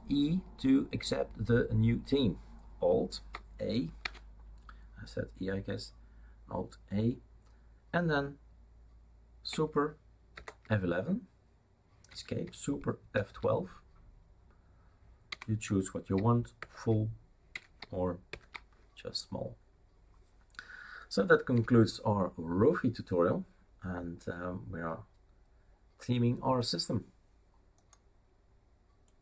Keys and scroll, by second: 4.0 alt+a, 10.3 super+F11, 12.2 Escape, 13.1 super+F12, 15.3 Escape, 16.5 super+F11, 17.5 Escape, 18.3 super+F12, 21.5 Escape.